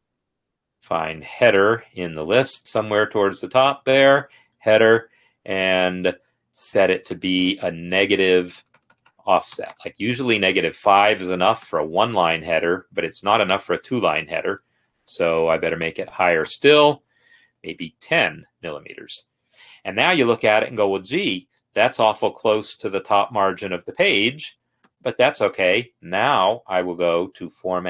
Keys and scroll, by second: 7.8 Down.